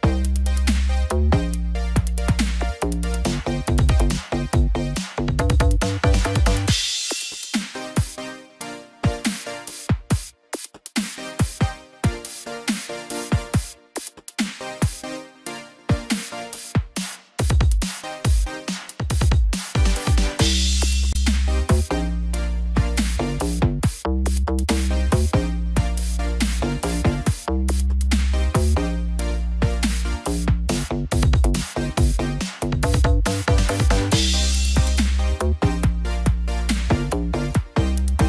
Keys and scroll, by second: 8.4 ctrl+t, 15.3 ctrl+t, 20.4 ctrl+0, 23.3 ctrl+g, 26.6 ctrl+j, 37.7 ctrl+0.